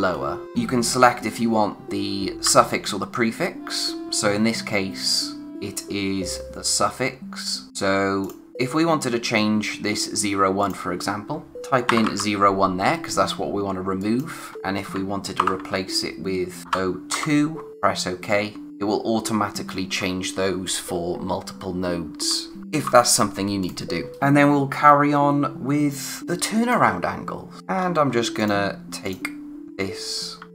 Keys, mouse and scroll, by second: 8.2 click, 10.6 click, 11.5 -, 11.8 0, 14.0 click, 16.6 0, 17.7 click, 22.2 ctrl+Num_Lock, 22.6 ctrl+z, 23.6 click, 24.1 scroll up 1, 26.2-26.9 scroll down 1, 27.6-28.3 scroll up 1, 28.3 click, 30.3 d.